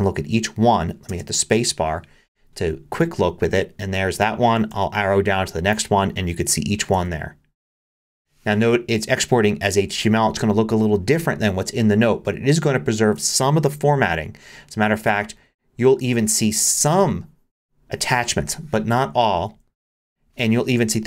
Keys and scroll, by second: 1.1 space, 4.7 Down, 6.9 Down, 13.7 Down, 19.5 Down.